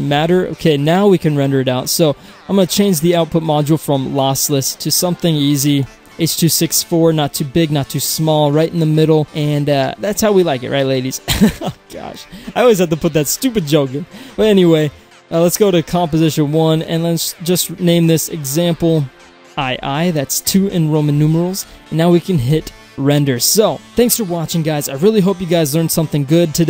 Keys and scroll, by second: 0.4 Return, 20.6 Return.